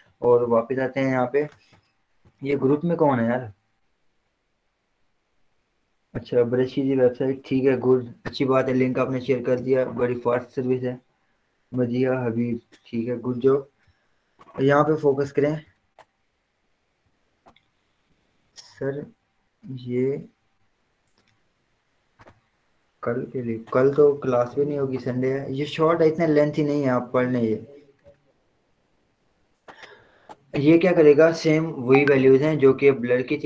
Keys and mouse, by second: 15.5 click, 15.9-27.3 drag.